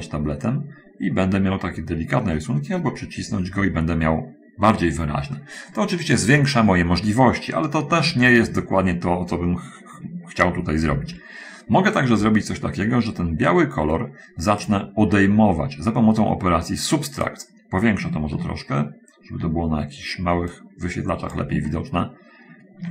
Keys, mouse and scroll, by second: 11.2 ctrl+z, 17.6 click, 18.7-19.9 ctrl+middle drag, 20.8-21.9 drag, 22.0-22.9 ctrl+middle drag.